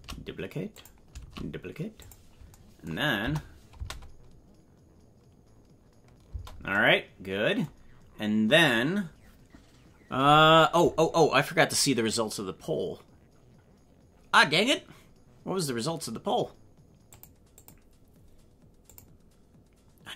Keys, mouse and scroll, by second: 1.1 shift+d, 3.2 KP_0, 3.7 space, 6.3 space, 7.7-8.2 scroll down 6.